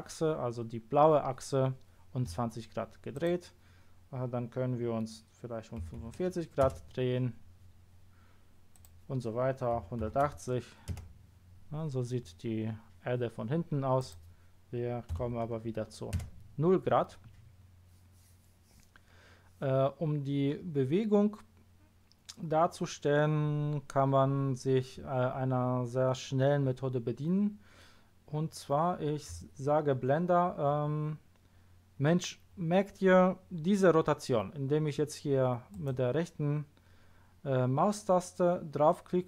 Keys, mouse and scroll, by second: 3.1 click, 5.8 KP_4, 6.6 Return, 8.7 click, 9.8 KP_1, 10.0 KP_8, 10.2 KP_0, 10.8 Return, 14.0 click, 15.0 KP_0, 16.2 Return, 35.7 right click.